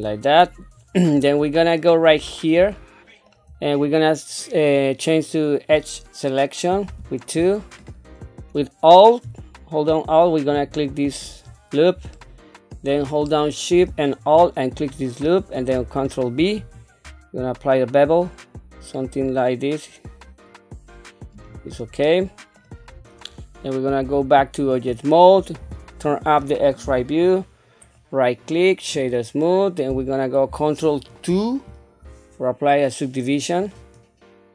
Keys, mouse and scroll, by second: 1.2 middle click, 2.1-2.6 scroll up 2, 2.7 shift+middle click, 8.2 scroll up 1, 10.5 alt+click, 12.1 shift+middle click, 13.2 middle click, 14.7 alt+shift+click, 16.5 ctrl+b, 22.0 middle click, 22.9-24.0 scroll down 2, 24.0 Tab, 24.6-25.1 scroll down 2, 25.6 q, 26.8 KP_1, 27.8-29.1 right drag, 31.4 ctrl+2, 33.6 click.